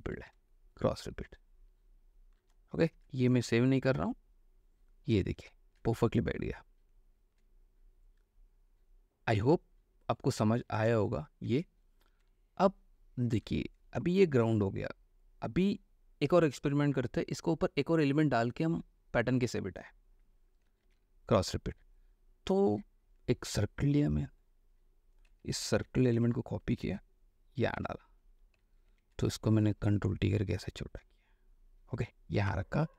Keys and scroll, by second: 2.9 ctrl+alt+w, 5.4 space, 11.7 ctrl+s, 12.3 ctrl+space, 21.0 ctrl+o, 25.6 ctrl+a, 26.0 ctrl+c, 26.3 ctrl+w, 27.9 ctrl+v, 29.0 ctrl+t, 32.7 Return.